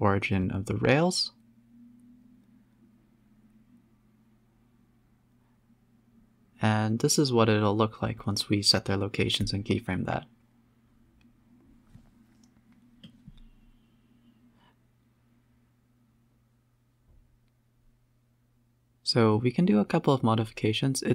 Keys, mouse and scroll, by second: 0.0 space, 0.2 middle click, 1.2 click, 2.2 click, 2.5 shift+click, 4.5-5.8 drag, 5.8 scroll up 3, 6.0 space, 6.2-6.8 scroll down 1, 6.8-7.1 scroll down 1, 8.2 z, 8.8-9.4 scroll down 1, 9.4-11.0 middle drag, 11.0 space, 11.4 space, 11.8 space, 12.1-12.5 scroll up 2, 12.8 KP_7, 13.0 z, 13.7 scroll up 1, 14.4-15.4 drag, 15.4 scroll up 2, 16.0 g, 17.1 a, 17.2 a, 17.4 click, 17.6 g, 19.9 shift+click, 20.4 shift+click, 20.8 shift+click.